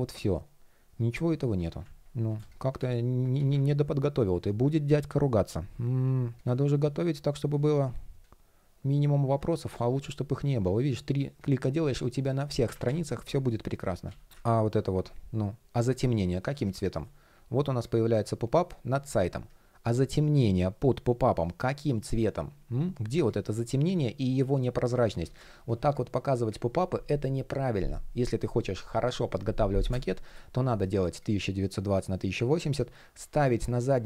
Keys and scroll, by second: 9.5 shift+p, 12.2 super+z, 19.3 shift+p, 24.6 super+z, 30.3 shift+p.